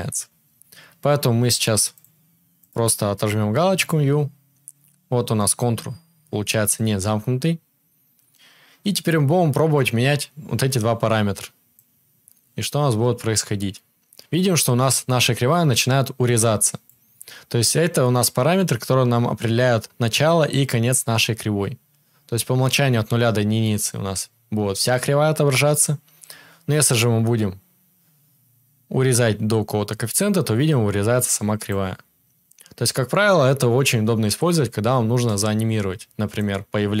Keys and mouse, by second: 11.7-37.0 drag, 11.7-37.0 middle drag.